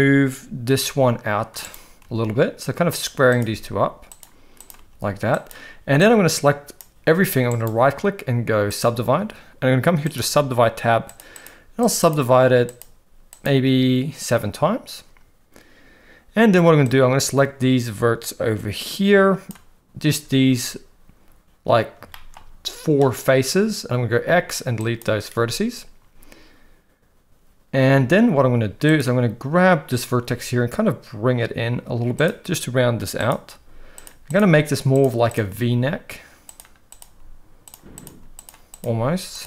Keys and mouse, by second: 2.0 g, 3.3 click, 3.4 g, 4.8 g, 6.0 click, 7.5-8.8 right drag, 10.0 click, 11.0 click, 11.3 click, 11.8 click, 12.0 click, 12.7 click, 13.3 click, 17.0-19.5 drag, 22.1 shift+middle click, 24.1 x, 28.8 click, 30.0 g, 33.2 click, 33.5 g, 34.4 g, 35.3 click, 35.5 g, 36.9 click, 37.0 g, 38.1 g, 38.8 g.